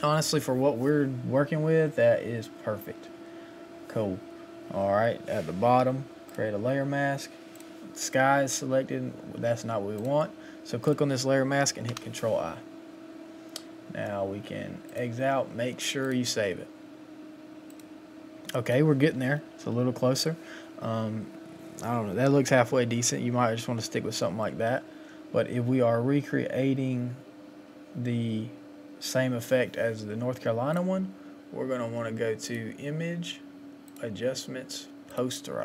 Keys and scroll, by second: 19.1 Up, 19.4 Up.